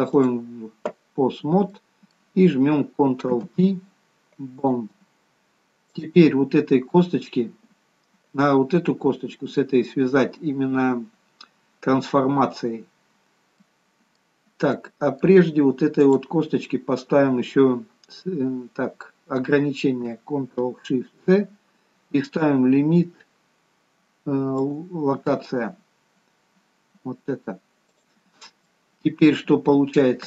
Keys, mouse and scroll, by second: 1.8 middle click, 3.3 ctrl+p, 5.9 click, 7.0-9.1 scroll down 2, 13.2-13.6 scroll down 1, 13.6 middle click, 14.4 scroll down 1, 14.7 middle click, 16.0 click, 21.5 ctrl+shift+c, 28.7 middle click, 29.6-30.2 scroll down 2.